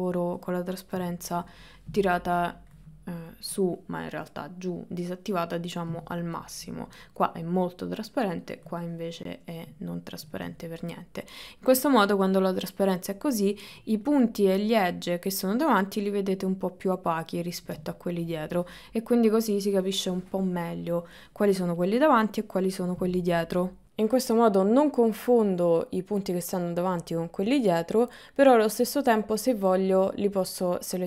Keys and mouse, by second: 1.0 KP_1, 2.6-8.6 drag, 9.9 ctrl+middle click, 10.7 shift+middle click, 17.9 shift+middle click, 23.8 shift+middle click, 24.8 click, 26.5-28.2 middle drag, 29.5 KP_1.